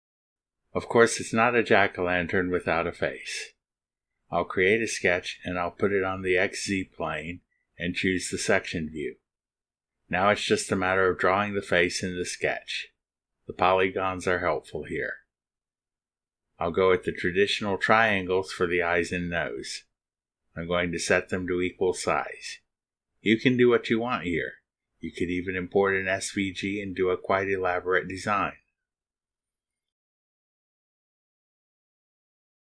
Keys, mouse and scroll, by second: 4.0 click, 5.7 click, 6.7 click, 7.8 click, 9.4 click, 10.0 click, 17.2 click, 18.1 click, 18.5 click, 19.7 click, 21.4 click, 22.7 click, 24.1 click, 26.4 click, 27.9 click, 28.6 right click, 29.5-30.7 scroll up 2, 30.7 click, 31.8 ctrl+click, 32.5 ctrl+click.